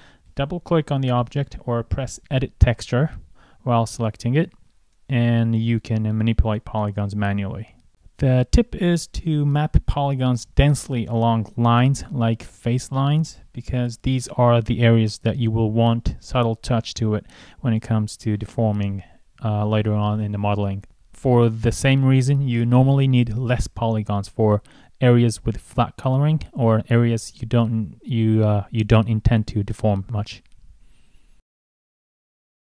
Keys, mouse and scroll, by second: 0.2 scroll up 1, 0.6 click, 7.4 scroll up 1, 11.1 scroll up 1, 11.7 scroll down 1.